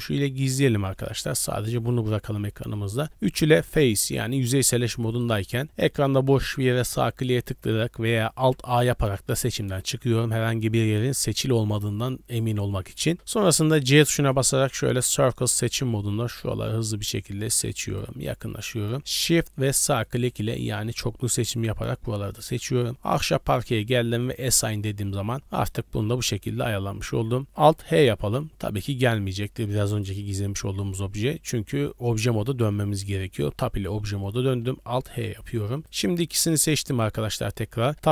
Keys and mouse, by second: 1.0 click, 13.8 c, 20.0 middle click, 22.6 middle click, 24.3 middle click, 25.4 click, 26.7 click, 28.0 alt+h, 29.9 click, 35.6 middle drag.